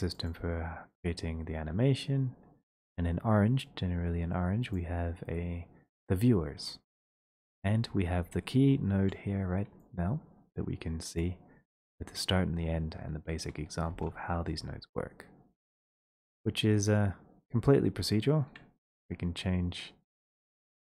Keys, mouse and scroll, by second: 0.3 click, 4.8 click, 5.4 scroll, 6.1-7.0 scroll, 7.5-8.3 scroll, 8.5-9.8 scroll, 11.2 click, 12.7-13.2 scroll, 13.9 ctrl+space, 15.5-16.1 scroll, 16.1-16.5 scroll, 17.0 click, 18.2 click, 19.3 click, 20.3 shift+click.